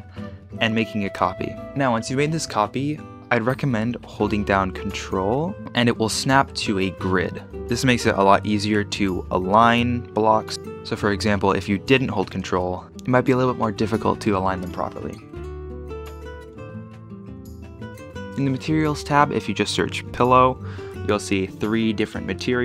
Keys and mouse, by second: 8.2 ctrl+click, 10.4 middle click, 12.3 shift+d, 15.2-17.3 typing, 16.5 shift+click, 17.2 KP_Subtract, 17.6 click, 20.2 l.